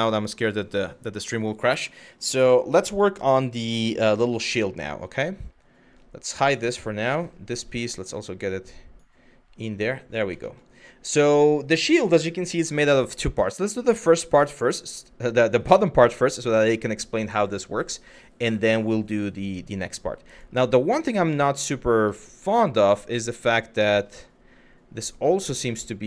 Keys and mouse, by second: 6.0 click, 6.8 click, 7.7 drag, 10.1 shift+middle click, 20.0 click, 21.7 shift+middle drag.